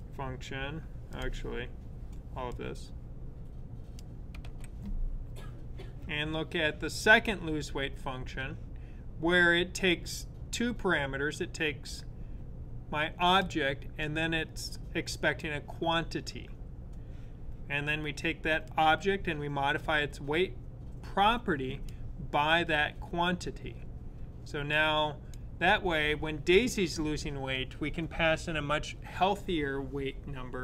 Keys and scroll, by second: 4.2 /.